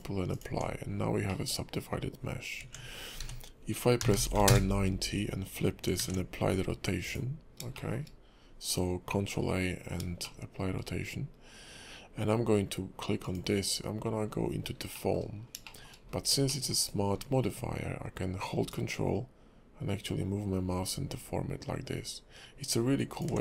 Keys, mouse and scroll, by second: 0.5 Tab, 0.8-1.3 scroll up 4, 1.3 middle click, 2.0-2.6 scroll down 3, 2.6 Tab, 3.2 r, 6.0 ctrl+a, 7.7 shift+middle click, 10.2 shift+middle click, 13.2 click, 14.3-14.9 scroll down 2, 14.9 middle click, 15.4 scroll down 2, 15.6 shift+middle click, 15.9-16.3 scroll up 4, 16.5 shift+middle click, 19.0 ctrl+click.